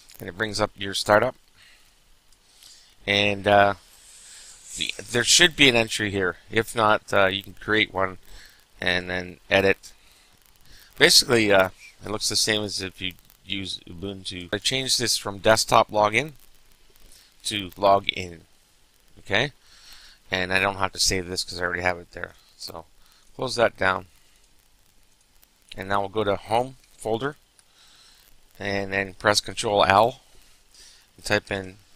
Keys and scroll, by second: 0.4 typing, 27.3 alt+Home, 30.0 ctrl+l, 31.6 typing.